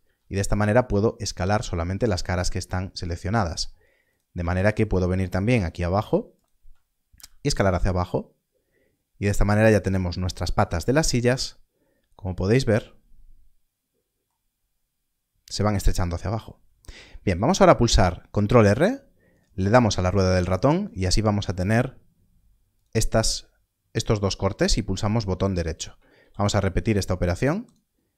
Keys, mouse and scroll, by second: 2.2 click, 4.9 shift+click, 6.3 shift+click, 7.1 s, 9.5 s, 10.8-11.5 scroll down 1, 14.5-16.0 scroll up 1, 17.3 ctrl+r, 19.5 ctrl+r, 25.9 scroll up 1, 26.1 ctrl+r, 27.6 scroll up 1, 27.6 right click.